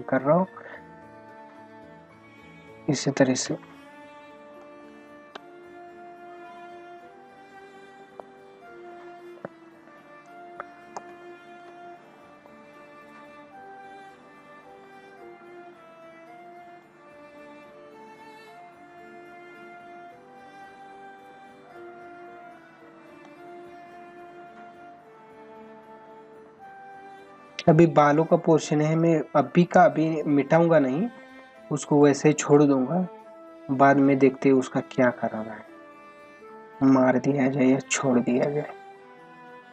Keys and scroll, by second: 4.6 space, 11.0 space.